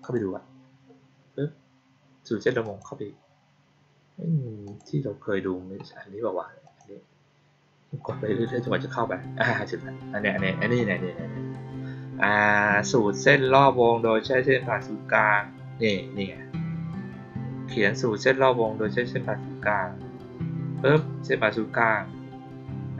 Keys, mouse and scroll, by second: 2.6 click, 4.6 click, 6.6 click, 9.5-11.9 scroll down 4, 16.4 scroll down 2, 19.5-20.3 scroll down 3, 20.6-20.9 scroll down 2, 21.9 middle click.